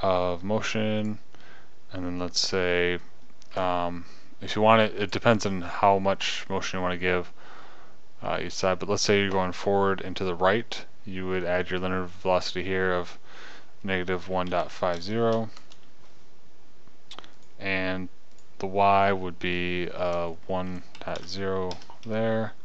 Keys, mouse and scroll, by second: 1.5-11.7 drag.